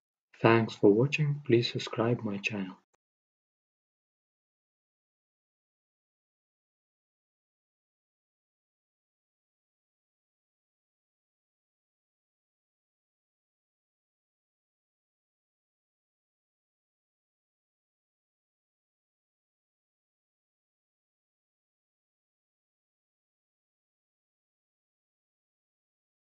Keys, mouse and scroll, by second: 5.1-7.0 middle drag, 7.0-9.0 drag, 9.0 right click, 9.4-10.8 middle drag, 10.8-12.8 drag, 14.1-15.9 drag, 15.8-22.8 middle drag, 22.8-24.8 drag.